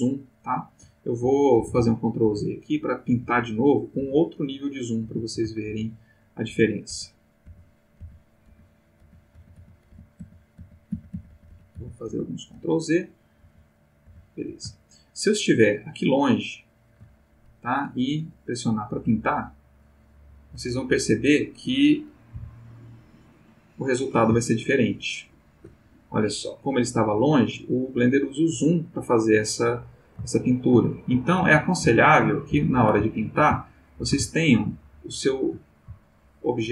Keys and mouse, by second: 1.6 ctrl+z, 3.2 ctrl+z, 4.0 ctrl+z, 5.0 ctrl+z, 6.5 ctrl+z, 13.4 ctrl+z, 14.9 ctrl+middle click, 15.7 ctrl+middle click, 16.4 ctrl+middle click, 19.4 click, 22.3 Right, 23.0 click, 24.4-25.8 ctrl+middle drag, 30.3 shift+middle click, 31.4 ctrl+z, 32.5 ctrl+z, 33.1 ctrl+shift+middle click, 33.9-35.7 ctrl+shift+middle drag, 35.9 shift+middle click.